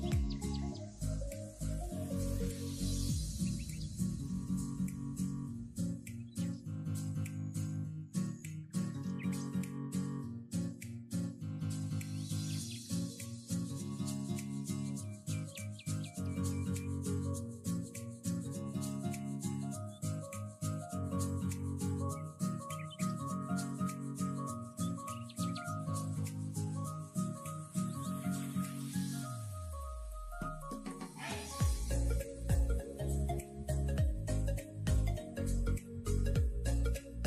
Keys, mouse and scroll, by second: 0.0 ctrl+r, 0.7 scroll down 2, 0.9 middle click, 1.0 Tab, 1.1 click, 1.3 middle click, 1.5 scroll down 4, 1.6 middle click, 1.8-2.1 scroll up 6, 2.1 KP_3, 2.3 KP_1, 2.9 drag, 3.0 Tab, 3.1-3.5 scroll up 2, 3.5 alt+z, 4.3 alt+click, 4.7 alt+click, 5.2 ctrl+KP_Add, 5.6 ctrl+KP_Add, 5.9 g, 7.5 s, 8.7 g, 9.8-10.6 scroll up 2, 10.6 alt+click, 11.1 x, 12.5 alt+click, 12.8 ctrl+KP_Add, 13.1 ctrl+KP_Add, 13.5 scroll down 10, 13.8 shift+middle click, 14.0 scroll up 3, 14.2 alt+z, 15.0 g, 16.7 middle click, 17.5 scroll up 3, 17.7 shift+middle click, 18.1 click, 19.1 alt+click, 19.7 ctrl+KP_1, 19.9 scroll up 2, 20.0 shift+middle click, 20.3 g, 21.2 scroll down 3, 21.4-21.8 middle drag, 21.8-22.5 scroll down 4, 22.5-23.0 scroll down 6, 22.6 Tab, 22.8 click, 23.0 middle click, 23.1-23.6 scroll up 11, 23.6 click, 23.7 Tab, 24.1 ctrl+r, 25.6-26.1 scroll down 4, 26.1 Tab, 26.2 click, 26.3 middle click, 26.5 scroll down 1, 26.7 middle click, 26.9 shift+middle click, 27.1-27.6 scroll up 2, 27.6 click, 27.8 click, 28.0 click, 28.4 middle click, 28.6 click, 29.0 click, 29.2 Tab, 29.4 a, 30.1 Tab, 30.2 right click, 30.8 click, 30.9-31.8 middle drag, 31.8 scroll up 2, 32.0 middle drag, 32.2 scroll down 2, 32.4-33.4 middle drag, 33.4 KP_3, 33.6 scroll down 1, 33.8-34.4 scroll up 1, 34.4 shift+middle click, 35.2 click, 35.6 alt+z, 35.8 shift+middle click, 36.1-37.2 scroll up 4.